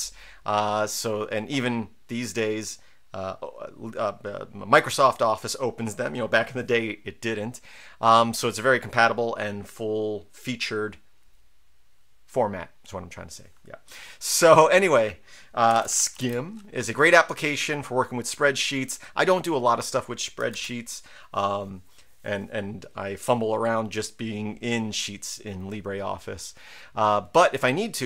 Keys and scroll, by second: 15.5-16.7 typing, 20.5 ctrl+c.